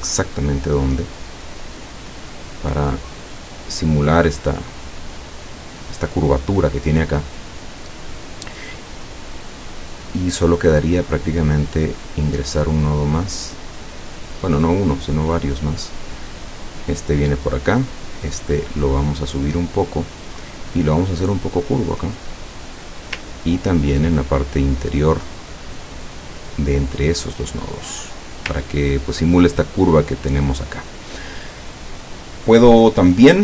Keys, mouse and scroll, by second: 11.4 click, 12.0-13.5 drag, 13.9-16.8 drag, 17.6 click, 18.3-20.8 drag, 21.3-23.1 drag, 23.4-24.0 ctrl+scroll up 4, 25.2 click, 26.1-28.6 drag, 28.7 ctrl+scroll down 2.